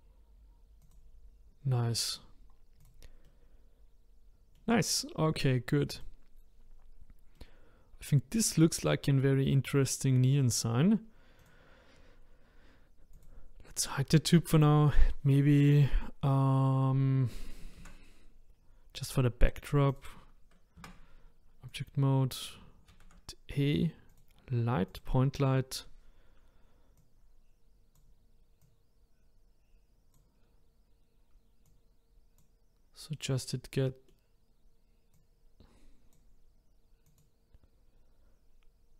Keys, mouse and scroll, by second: 2.3-2.8 scroll down 1, 2.8 click, 3.2-5.9 middle drag, 5.9 click, 7.4-10.4 middle drag, 11.4 click, 13.2 click, 17.8 shift+a, 19.9 click, 20.8 Tab, 21.7 click, 22.9 shift+a, 27.0 click, 28.6 click, 31.7 click, 33.2-35.1 middle drag, 35.1 click, 37.0 click.